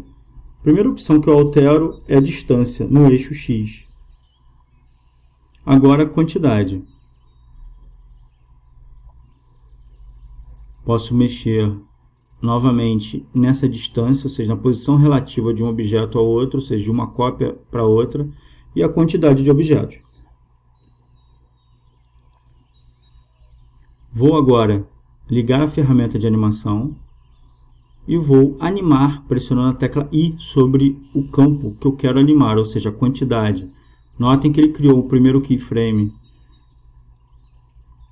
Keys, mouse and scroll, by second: 4.4-6.1 drag, 9.2-13.3 drag, 22.5-25.6 drag, 27.2-29.0 drag, 31.5 i, 37.5-38.1 drag.